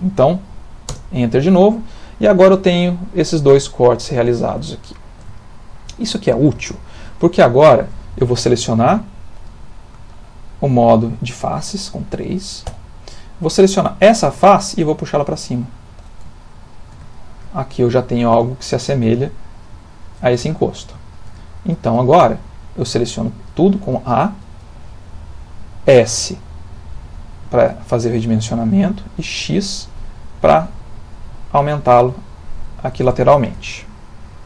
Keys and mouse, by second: 1.5 middle click, 3.5 middle click, 3.7 middle click, 4.9 ctrl+middle click, 5.1 ctrl+middle click, 5.4 shift+middle click, 5.6 shift+middle click, 6.1 ctrl+middle click, 7.5 shift+middle click, 12.7 3, 13.8 click, 14.8 click, 16.4 ctrl+middle click, 17.1 shift+middle click, 20.6 ctrl+middle click, 21.0 shift+middle click, 21.4 ctrl+middle click, 23.1 a, 25.9 s, 33.7 ctrl+middle click.